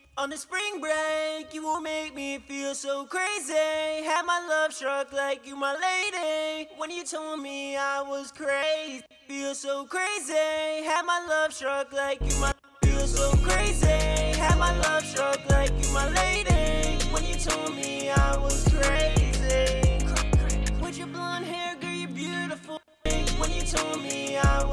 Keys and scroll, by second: 0.0 F1, 0.1 F2, 11.4 shift+s, 11.5 shift+s.